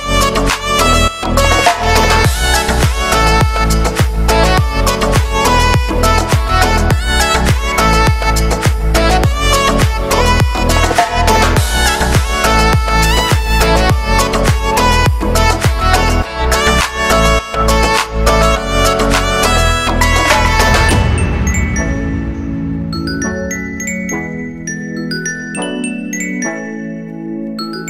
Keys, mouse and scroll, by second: 0.6-1.7 scroll down 2, 1.7 b, 2.0-3.4 scroll down 2, 2.3 shift+middle click, 3.4 b, 3.7 shift+middle click, 4.0-4.5 scroll up 4, 4.5 shift+middle click, 4.7-5.3 scroll up 1, 5.3-5.6 scroll up 1, 5.6 b, 5.7 scroll down 10, 6.0 shift+middle click, 6.1 click, 7.1 x, 7.3-7.7 scroll down 1, 7.7 z, 7.9 middle click, 8.8 scroll up 1, 9.0 middle click, 9.6-10.6 scroll up 1, 10.6 right click, 11.6 f, 11.8 scroll down 2, 11.9 shift+middle click, 12.3 scroll up 2, 12.6 shift+middle click, 13.0 scroll down 4, 13.1 shift+middle click, 13.4 scroll up 2, 13.6 ctrl+z, 13.9 middle click, 14.1 scroll down 1, 14.3 shift+middle click, 14.9 Tab, 15.3-19.4 middle drag, 19.4-20.7 drag, 21.2-22.6 middle drag, 22.6 scroll down 1, 22.7 shift+middle click, 23.6 click, 23.8 Tab, 24.1 right click, 24.8 l, 25.1 scroll down 1, 25.3 shift+middle click, 25.8 scroll up 1, 26.0 shift+d, 26.8 ctrl+m, 27.6 shift+n, 27.8 scroll up 1.